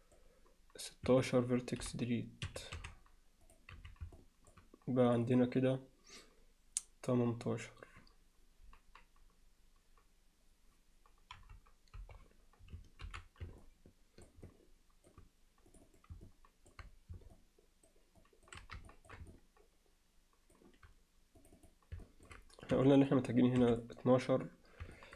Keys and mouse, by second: 1.8 c, 2.8 x, 3.8 z, 4.2 alt+middle click, 5.3 click, 11.4 KP_Divide, 12.0 KP_Divide, 13.1 alt+h, 13.6 alt+middle click, 14.5 alt+middle click, 15.7 click, 15.9 click, 16.3 alt+middle click, 17.3 alt+middle click, 18.2 alt+middle click, 18.9 ctrl+alt+middle click, 19.3-20.6 alt+middle drag, 21.4 click, 22.1 alt+middle click, 22.7 4, 23.1 click, 23.6 3, 23.7 click, 25.0 alt+middle click.